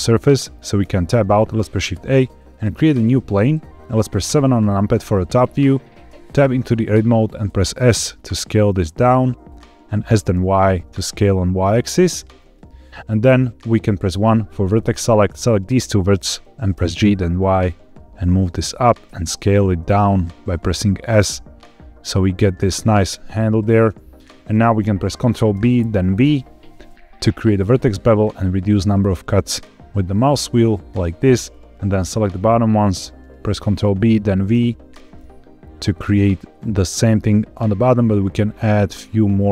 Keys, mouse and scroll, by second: 0.0 middle click, 0.7 Tab, 1.3 shift+a, 4.2 KP_7, 5.3-5.6 scroll up 1, 6.0 Tab, 8.3 s, 9.4 click, 10.0 s, 10.3 y, 12.3 click, 14.0 1, 14.9 click, 16.7 g, 16.9 y, 18.6 click, 19.0 s, 23.6 click, 24.6-25.1 scroll up 2, 25.4 ctrl+b, 26.1 v, 27.8-28.5 scroll down 5, 28.7-29.2 scroll up 1, 30.8 click, 31.4 click, 33.6 ctrl+b, 34.4 v, 35.9-36.6 scroll up 1.